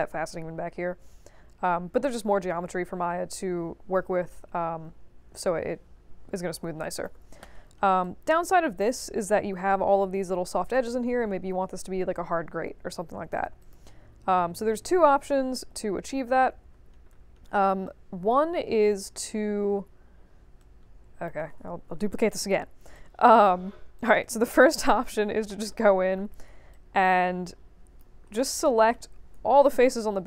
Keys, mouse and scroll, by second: 3.2 1, 3.9 3, 6.8 alt+drag, 7.6 middle click, 8.0 alt+click, 12.3 middle click, 12.9 alt+click, 13.6 click, 14.2 space, 15.2 space, 16.0 f, 16.3 middle click, 16.6 middle click, 17.1 middle click, 17.8-18.5 right drag, 19.7 middle click, 20.5-21.2 right drag, 21.6 ctrl+d, 21.9 w, 22.9-23.4 drag, 23.7 q, 23.9 click, 24.2 right click, 25.0 scroll down 2, 25.4 alt+middle click, 26.3 1, 26.7-27.9 drag, 28.3 alt+middle click.